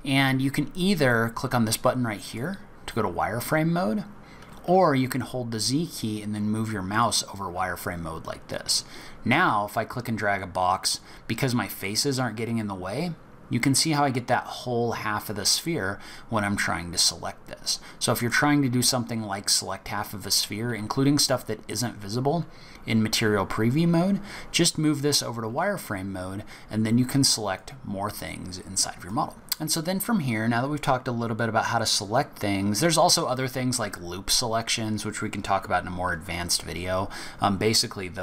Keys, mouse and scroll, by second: 2.3 click, 5.1 z, 8.7 click, 11.8 middle click, 16.6-18.1 scroll down 1, 18.1 click, 20.9 z, 23.8 z, 27.5 click, 29.3 middle click, 29.3-30.0 scroll up 2, 37.7 click.